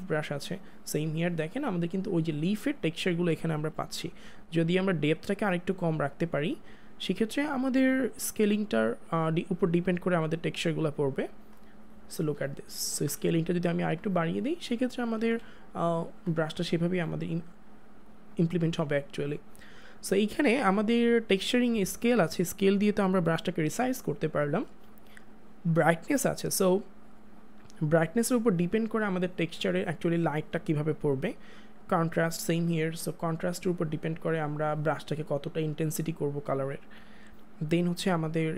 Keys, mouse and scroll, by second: 3.4 click, 3.7 ctrl+z, 4.9 click, 12.7 click, 13.0 ctrl+z, 13.3 click, 15.2 ctrl+z, 15.7 click, 25.5 click, 31.9 click.